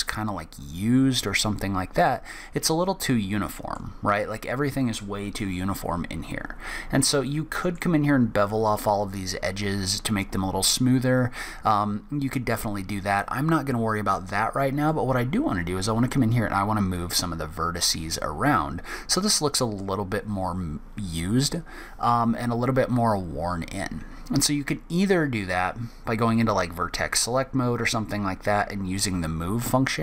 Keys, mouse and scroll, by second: 2.0 middle click, 6.3-6.8 scroll up 1, 6.8-7.2 scroll down 1, 7.2 middle click, 14.8 middle click, 18.8 middle click.